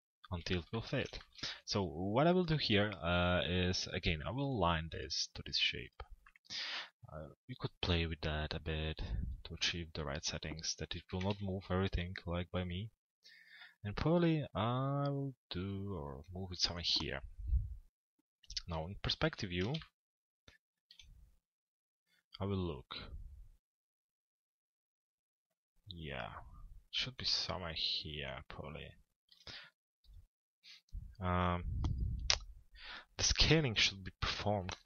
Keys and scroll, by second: 10.7 t, 11.3 z, 18.3 p, 19.2 z, 34.4 l.